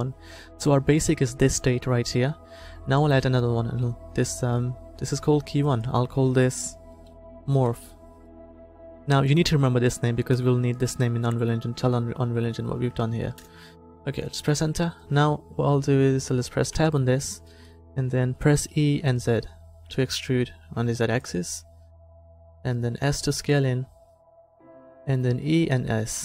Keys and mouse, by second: 3.3-5.2 drag, 5.6-7.7 drag, 16.8 Tab, 18.7 e, 22.7 s, 25.4 e.